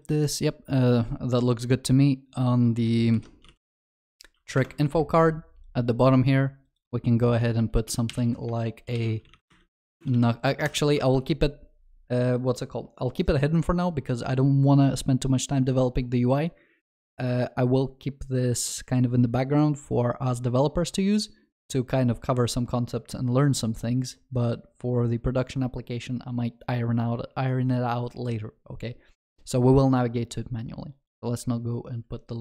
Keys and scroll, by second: 3.2 ctrl+shift+n, 10.7 ctrl+y, 11.0 ctrl+s.